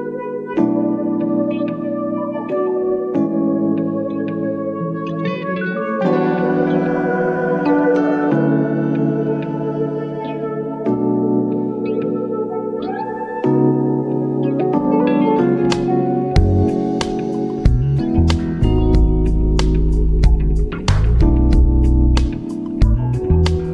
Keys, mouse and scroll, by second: 3.5 click, 4.2 shift+super+Escape, 8.1-10.6 drag, 16.4 click, 20.3-21.3 scroll down 2, 23.1 click.